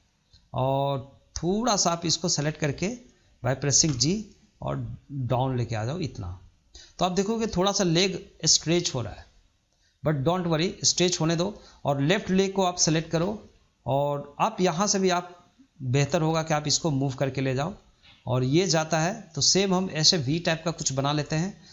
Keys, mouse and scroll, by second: 0.9 click, 1.9 click, 3.7 g, 11.9 click, 15.1-16.3 drag.